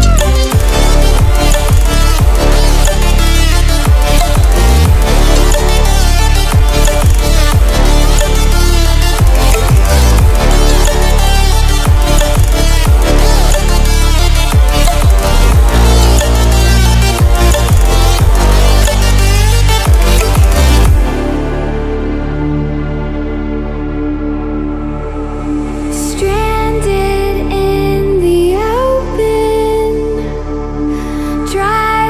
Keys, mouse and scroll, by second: 0.4 click, 0.9 scroll down 1, 2.7-3.6 scroll up 1, 3.9 ctrl+alt+scroll up 1, 5.0 click, 16.1 click, 16.9 ctrl+alt+scroll up 1, 17.6-17.9 ctrl+alt+scroll down 1, 18.3 ctrl+alt+scroll up 1, 19.4 click, 21.4 ctrl+w, 23.1 ctrl+w, 24.2-26.6 drag.